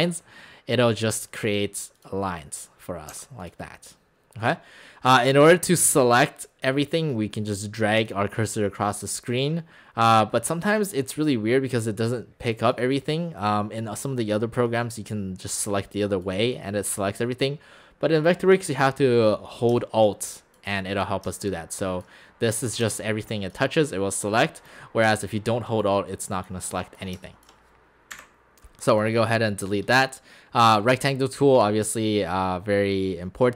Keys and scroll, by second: 3.1 x, 28.1 alt+Delete.